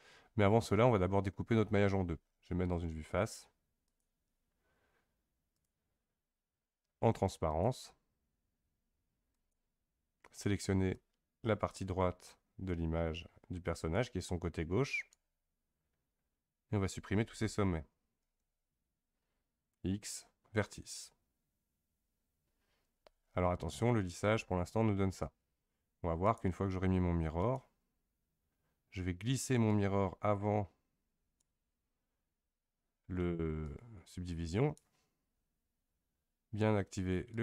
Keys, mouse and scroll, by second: 3.8-7.0 drag, 7.5-9.5 drag, 10.9 click, 18.2 x, 26.2 click, 27.5-29.3 drag, 29.7-31.4 drag, 33.6-36.7 drag, 37.3 click.